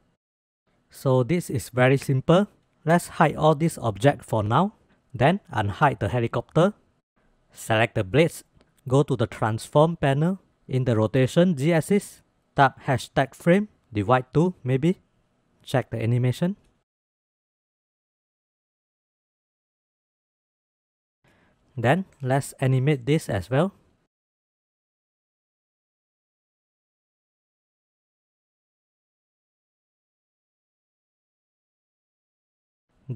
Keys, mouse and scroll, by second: 3.0-3.6 drag, 5.0 click, 7.7 click, 8.3 middle click, 11.1-15.3 drag, 15.7-16.4 drag, 16.5 space, 18.0-18.6 drag, 18.8-19.3 shift+drag, 20.7 space, 21.8 shift+middle drag, 22.7 middle click, 23.4 click, 24.8-27.1 middle drag, 27.1 click, 28.9-29.4 drag, 29.5 space, 31.2 space, 32.0 drag.